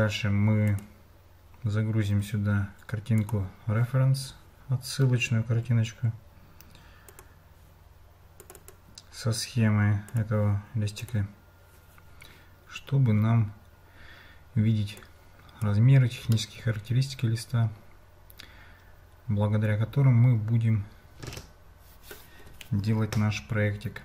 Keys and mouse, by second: 3.2 click, 15.1 click, 16.3-22.3 middle drag.